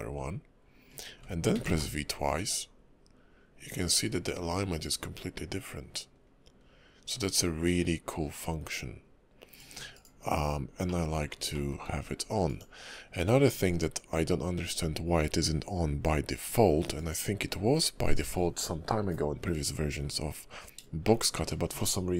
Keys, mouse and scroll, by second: 10.8 middle click, 11.5 shift+middle click, 12.5 click, 21.0 shift+middle click.